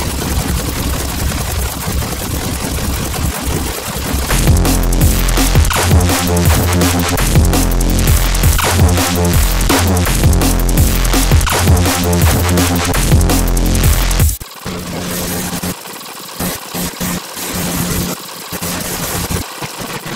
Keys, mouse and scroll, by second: 0.0 ctrl+click, 0.3 alt+click, 0.4 click, 0.7 alt+click, 1.2 click, 1.3 alt+click, 1.6 alt+click, 2.1 scroll down 2, 2.2 click, 2.4 click, 2.9 click, 3.0 alt+click, 3.3 alt+click, 3.6 alt+click, 4.0 alt+click, 4.7 scroll down 2, 11.0-12.1 right drag, 12.8 Delete, 13.4 click, 13.5 Delete, 13.8 scroll down 1, 14.2-16.7 typing, 15.2 scroll up 2, 15.3 click, 15.7 scroll down 2, 15.8 click, 15.9 click, 16.6 alt+click, 16.9 click, 17.1 scroll down 2, 17.2 ctrl+click, 17.7 click, 18.0 click, 18.1 click, 18.1 scroll up 2, 18.2 scroll down 2, 18.4 alt+click, 18.5-20.1 typing, 18.9 click, 18.9-19.5 scroll down 3, 19.0 click, 19.0 Delete, 19.2 click, 19.5 click, 19.6 right click, 19.8 scroll up 2, 19.9 click.